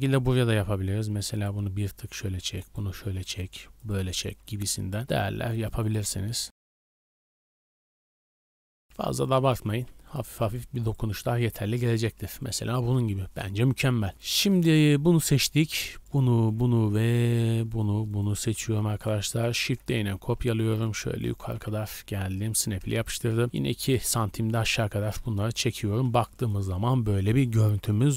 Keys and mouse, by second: 0.4 g, 2.2 g, 3.4-10.6 typing, 6.6 Tab, 6.7 Tab, 6.7-8.3 shift+drag, 8.5-9.7 drag, 9.8-11.3 drag, 11.3 Tab, 11.6 a, 11.8 a, 14.9-16.0 shift+middle drag, 16.0 shift+click, 16.2 shift+middle drag, 16.4 shift+click, 16.6-17.7 shift+middle drag, 17.7 shift+click, 18.6 click, 18.6 g, 19.4 shift+click, 19.9 shift+d, 20.1 click, 20.9 shift+middle drag, 21.2 click, 21.4 g, 22.1 ctrl+middle click, 23.2 g, 24.6 a, 24.8 a, 25.2-25.6 shift+middle drag.